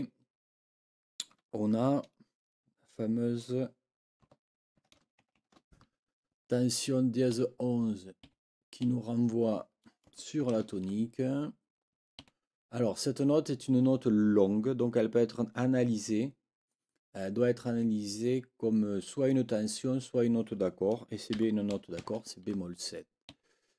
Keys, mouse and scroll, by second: 7.3 Right, 8.2 Right, 10.4 shift+t, 12.2 Right, 21.3 b, 23.3 Right.